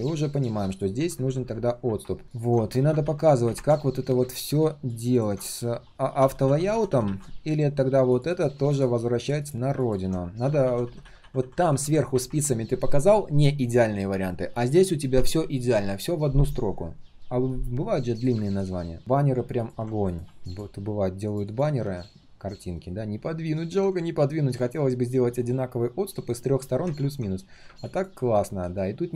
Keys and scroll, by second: 21.9 ctrl+shift+3, 22.3 ctrl+shift+3, 28.2 ctrl+shift+3, 28.6 ctrl+shift+3.